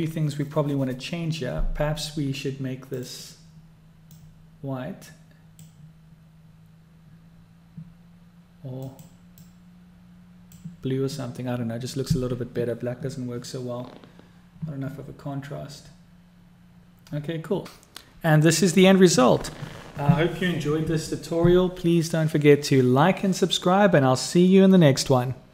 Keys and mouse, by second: 3.7 click, 5.5-7.3 middle drag, 7.4-9.2 middle drag, 9.4 middle click.